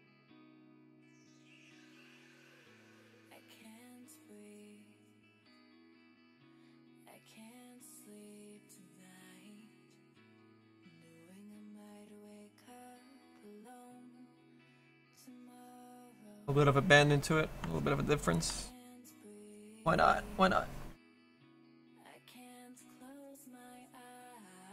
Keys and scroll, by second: 3.7 s.